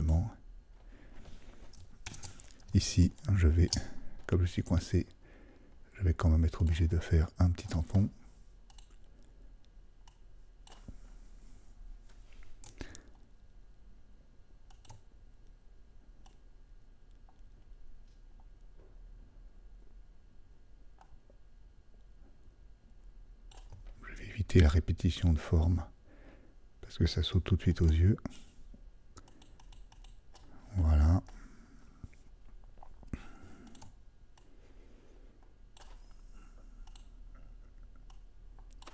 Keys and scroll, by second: 2.1 alt+super+0.